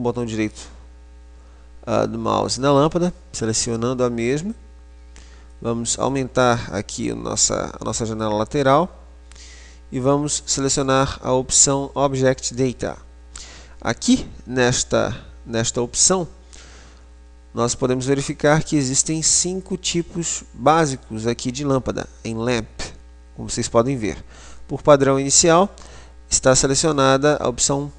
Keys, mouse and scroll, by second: 5.3-7.5 drag, 12.8 click.